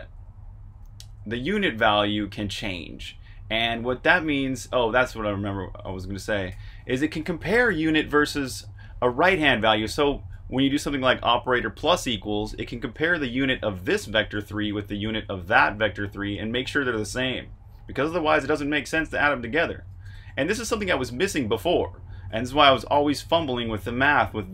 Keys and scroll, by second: 0.0-0.4 typing, 1.9 typing, 3.3-6.4 typing, 13.1 Escape, 13.3-14.8 typing, 19.7-21.5 typing.